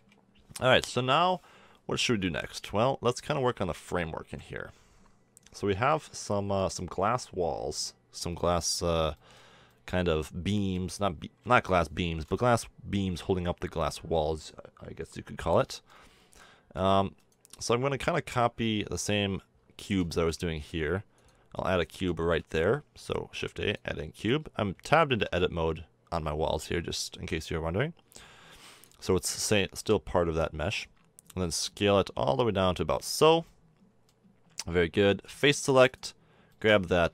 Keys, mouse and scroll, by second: 4.2 KP_7, 9.1-10.2 middle drag, 11.4 KP_7, 13.2 z, 17.5-18.2 drag, 18.2 Tab, 18.9-20.1 middle drag, 22.4 shift+a, 25.1 Tab, 26.6 Tab, 27.3 middle click, 28.1 s, 29.1 middle click, 31.3 s, 35.8-37.1 middle drag.